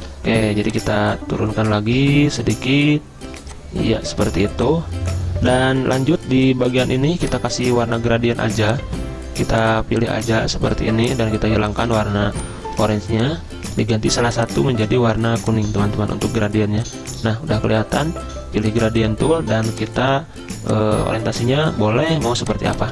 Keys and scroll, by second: 0.0 `.